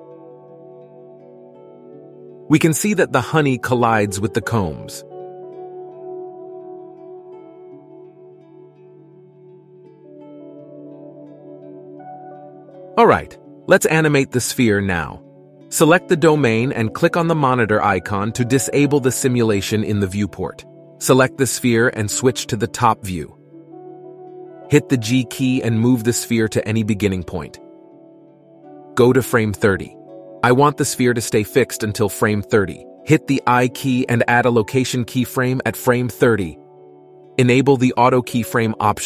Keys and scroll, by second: 23.0 KP_7, 25.5 g, 34.2 i.